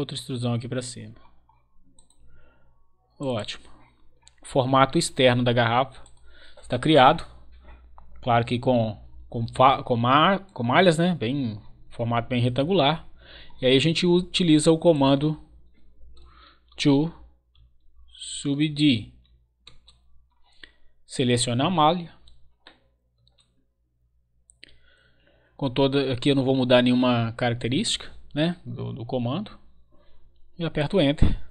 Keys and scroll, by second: 16.4-19.4 typing, 19.6 Return, 23.1 Return, 30.8 Return.